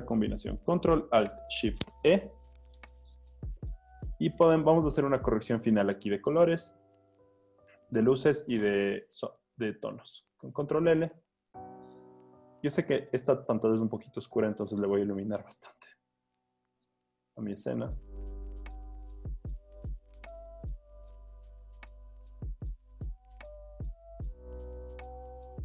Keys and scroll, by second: 10.5 super+l.